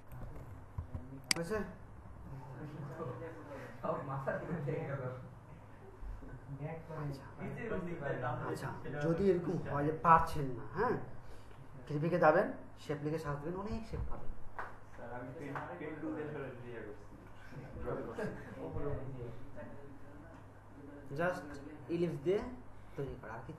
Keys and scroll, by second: 0.8 BackSpace.